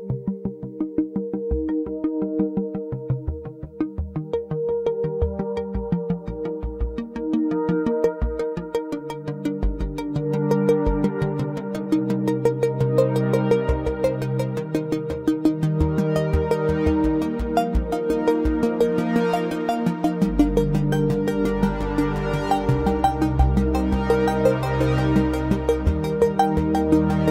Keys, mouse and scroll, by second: 1.4-4.3 drag, 5.7 click, 6.4 Tab, 7.5 scroll up 1, 7.6 middle click, 8.3-9.4 scroll up 3, 9.1 middle click, 10.7 3, 11.4 alt+click, 12.2-13.5 middle drag, 14.6 click, 15.5 click, 16.0-18.9 drag, 20.0 click, 21.3 click, 23.1 Tab, 24.1 click.